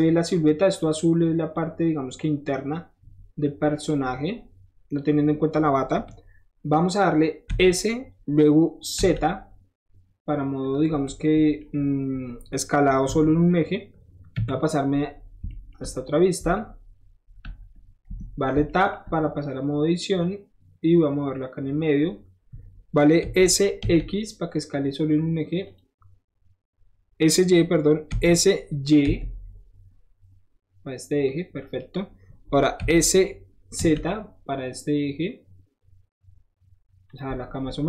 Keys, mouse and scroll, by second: 1.5-3.9 shift+drag, 4.1-4.4 scroll down 2, 4.6 middle click, 6.9 scroll up 1, 7.6 s, 10.6 click, 10.9 middle drag, 11.6 middle drag, 13.2 KP_1, 15.3-15.7 shift+middle drag, 15.9 shift+middle click, 17.0 shift+middle click, 18.1 Tab, 18.4 middle click, 18.5 middle click, 18.7-20.2 middle drag, 20.2-21.9 drag, 23.8 x, 25.7 click, 28.2 s, 31.3 click, 32.9 s, 37.1 click, 37.5 middle click.